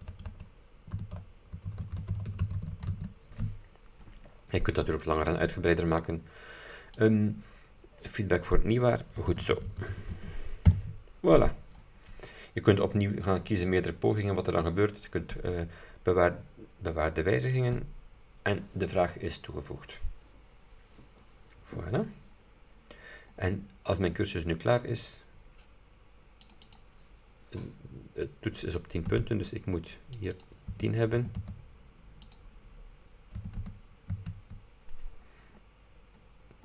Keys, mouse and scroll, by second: 1.0-3.5 typing, 7.1 click, 9.1-10.7 typing, 12.4-12.9 scroll down 2, 17.5 click, 23.6 scroll up 2, 26.6 click, 29.2 KP_0, 30.3 click, 30.8 KP_0, 31.3 KP_1, 31.5 KP_0, 32.4 click, 33.5 KP_1, 33.7 KP_0, 34.2 KP_Enter, 35.5 scroll down 2.